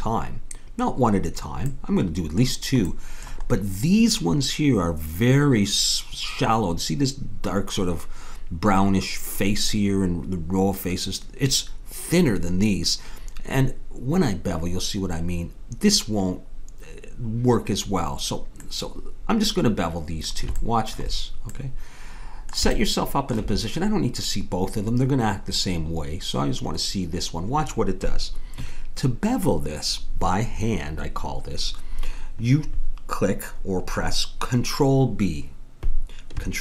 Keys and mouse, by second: 1.9-7.8 middle drag, 18.6-20.8 middle drag.